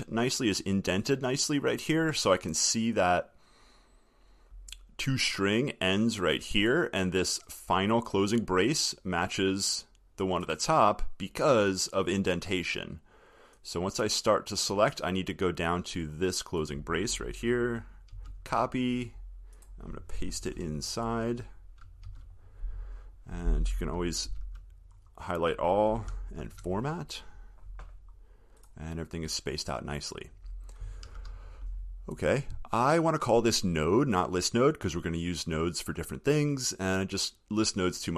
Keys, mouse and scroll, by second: 18.4 ctrl+c, 22.3 ctrl+v, 24.5 ctrl+a, 26.7 alt+shift+f, 31.3 ctrl+s.